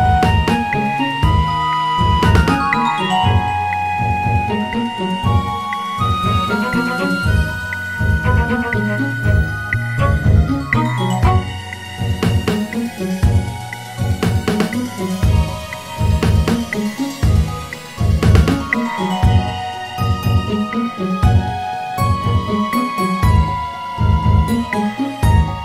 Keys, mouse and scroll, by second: 1.0 g, 4.4 Tab, 7.4 click, 8.8 e, 11.4 s, 14.4-15.8 scroll up 2, 15.8-17.3 drag, 17.3-20.3 scroll up 1, 22.6 click, 24.4-25.6 drag.